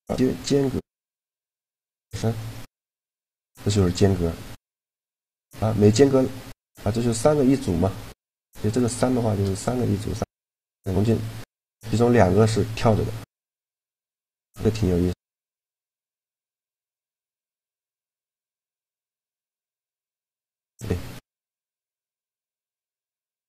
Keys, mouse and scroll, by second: 1.6-3.7 middle drag, 4.7-6.7 drag, 7.6-9.3 middle drag, 11.0-12.0 middle drag, 12.1-14.1 middle drag, 14.1-17.1 drag, 14.7-15.8 middle drag, 17.5 click, 17.9-19.8 drag, 19.0 a, 20.3-21.9 right drag.